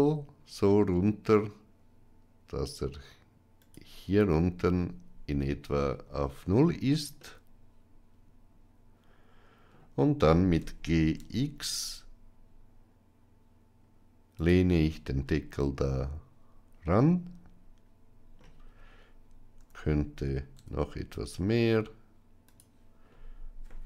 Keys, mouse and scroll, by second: 7.0-9.6 middle drag, 10.4 g, 14.6-18.3 middle drag, 19.4 r.